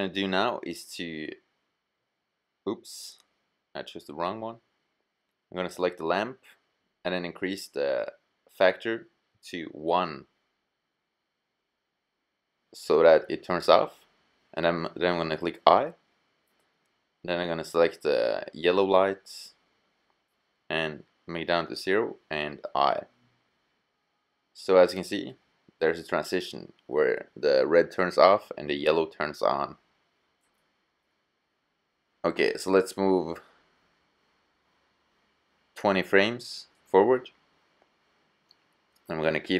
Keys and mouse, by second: 4.7-11.7 drag, 14.9 i, 16.6-20.2 drag, 20.5 i, 22.4-24.2 drag, 37.7-39.5 drag.